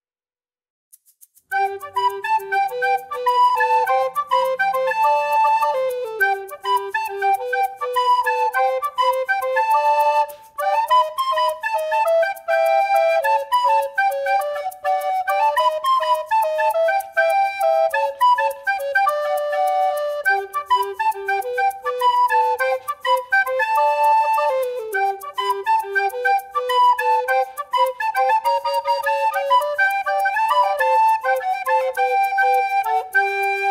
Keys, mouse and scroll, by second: 0.0-3.3 typing, 0.1 shift+middle click, 0.3-0.8 scroll up 4, 0.6 shift+middle click, 1.0 click, 3.4 scroll up 3, 3.6 shift+middle click, 4.0 alt+shift+click, 4.1 shift+middle click, 4.2 alt+shift+click, 4.3 middle click, 4.6-4.9 scroll up 1, 4.9 s, 5.2-6.4 scroll up 35, 5.2 shift+middle click, 5.4 shift+middle click, 5.5 g, 5.8 shift+middle click, 6.3 shift+middle click, 6.4 shift+middle click, 6.6 g, 7.1-7.4 scroll down 7, 7.4 shift+click, 7.6 shift+click, 7.8 shift+click, 8.0 middle click, 8.2 a, 8.3 b, 8.4 x, 8.6 scroll down 4, 8.6-9.6 middle drag, 9.6 scroll up 1, 9.8 alt+click, 9.9 middle click, 10.2 click, 10.4 Tab, 10.4 click, 10.6 middle click, 11.6 scroll down 2, 11.6 shift+middle click, 11.8 alt+shift+click, 11.9 middle click, 12.1 shift+middle click, 12.4 Tab, 12.6 click, 13.1 middle click, 13.5-17.6 typing, 13.6 Tab, 13.7 shift+middle click, 13.8 scroll up 1, 14.5 shift+middle click, 15.1 shift+middle click, 15.9 shift+middle click, 17.5 scroll up 4, 18.1 Tab, 18.2 middle click, 19.2 shift+middle click, 19.4 KP_3, 19.5 shift+middle click, 19.6 scroll up 3, 19.7 Tab, 19.7 shift+middle click, 19.8 scroll down 5, 19.8 Tab, 20.2 middle click, 20.5 click, 20.7 middle click, 20.7 scroll up 1, 20.9-24.2 typing, 21.2 alt+click, 22.3 alt+click, 22.7 scroll up 2, 23.2 alt+click, 23.5 alt+click, 24.3 shift+middle click, 24.4-25.6 scroll up 4, 24.6 middle click, 24.8 shift+middle click, 25.6 alt+shift+click, 26.0 alt+shift+click, 26.0 scroll up 1, 26.0 middle click, 26.2 alt+shift+click, 26.5 alt+shift+click, 26.7 shift+click, 26.8 alt+shift+click, 27.1 middle click, 27.3 shift+click, 27.4 middle click, 27.7 shift+click, 27.7 shift+middle click, 28.0 alt+shift+click, 28.1 alt+shift+click, 28.8 shift+middle click, 29.0 shift+click, 29.3 shift+click, 29.4 shift+middle click, 29.5 scroll up 1, 29.6 shift+click, 29.7 scroll down 1, 29.7 middle click, 30.0 shift+click, 30.1 shift+click, 30.2 shift+middle click, 30.6 middle click, 30.8 scroll up 1, 30.9 shift+middle click, 31.5 middle click, 31.8 shift+click, 31.9 middle click, 32.5-33.0 scroll up 2, 33.0 middle click, 33.3 shift+click, 33.4 shift+middle click, 33.6 shift+click.